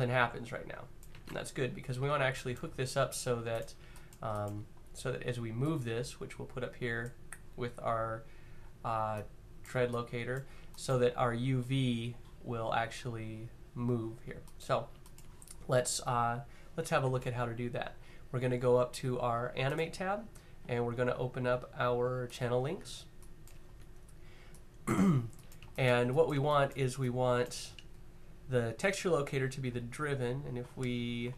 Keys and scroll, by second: 0.8 z, 3.3 q.